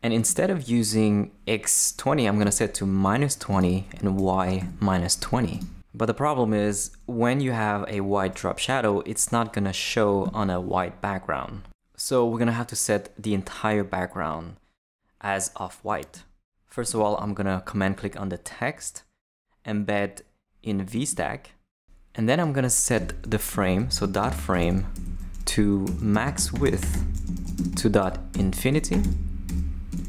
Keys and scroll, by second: 2.4 -, 4.6 -, 23.0 Return, 23.3-30.0 typing, 24.9 Left.